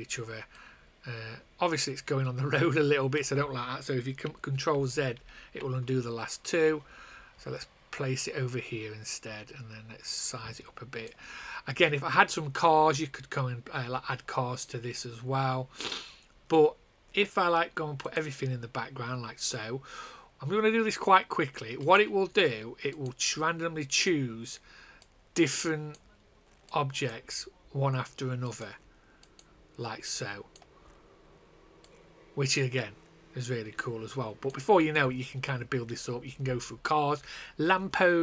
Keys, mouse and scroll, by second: 0.5 click, 3.3 click, 4.6 ctrl+z, 8.1 click, 11.2 click, 18.0 click, 26.1 click, 34.6 click.